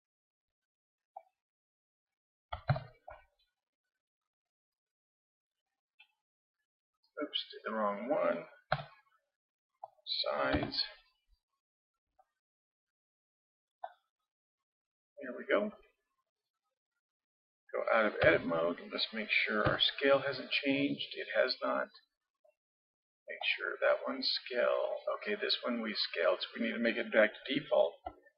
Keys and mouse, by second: 2.7 ctrl+KP_3, 3.4-7.1 middle drag, 8.7 KP_7, 10.6 s, 14.2 click, 14.7-16.0 middle drag, 16.0-18.2 drag, 18.2 Tab, 19.7 n, 23.4-25.4 drag.